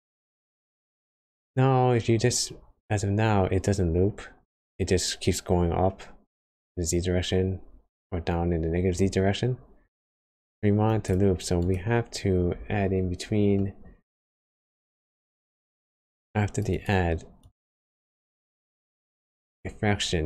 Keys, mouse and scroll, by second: 11.6 click, 11.9-12.8 scroll down 3, 13.5 middle click, 14.1 scroll up 1, 15.2 click, 16.7 click.